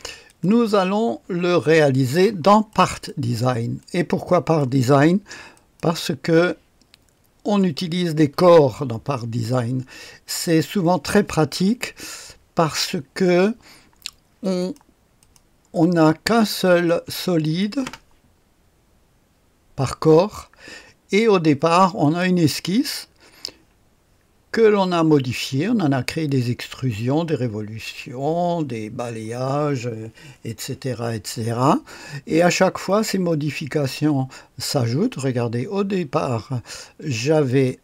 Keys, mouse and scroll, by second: 0.2 click, 0.6 space, 1.8-3.7 right drag, 3.8-5.1 drag, 5.5 click, 7.5 click, 14.5-16.3 drag, 16.2-17.8 typing, 16.7 click, 17.4 click, 22.0 click, 37.4 click.